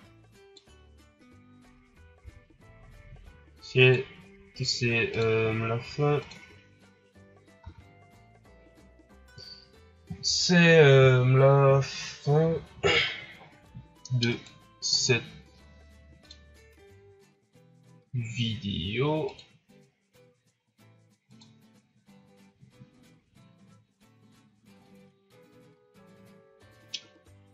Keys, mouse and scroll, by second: 2.2 a, 3.8 right click, 5.5 click, 7.5 a, 14.2 right click, 14.9 right click, 16.2 click, 19.4 click, 25.3 scroll down 2, 26.1 scroll down 4.